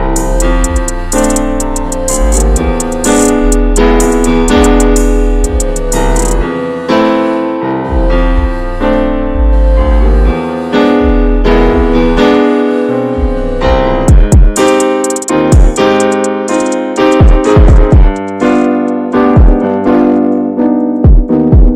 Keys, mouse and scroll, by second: 0.7 ctrl+s, 1.0-1.6 shift+middle drag, 1.6 Tab, 1.9 click, 2.5 alt+middle click, 2.9 alt+middle click, 5.1 alt+middle click, 6.0 ctrl+s, 6.2-6.7 scroll down 1, 6.7 shift+middle click, 6.9-7.5 scroll up 3, 7.5-8.5 shift+middle drag, 8.5-11.3 scroll up 13, 8.8 shift+middle click, 11.3 shift+right click, 11.7-13.2 scroll up 8, 13.3-13.8 scroll down 7, 13.8 middle click, 13.9 scroll up 2, 14.2 ctrl+s, 14.5 alt+middle click, 15.1-15.5 scroll up 1, 15.7 shift+middle click, 16.0-17.9 scroll up 14, 17.9 shift+right click, 18.6-20.6 scroll down 39, 20.6-21.1 shift+scroll up 1, 21.1 ctrl+s, 21.6 shift+middle click.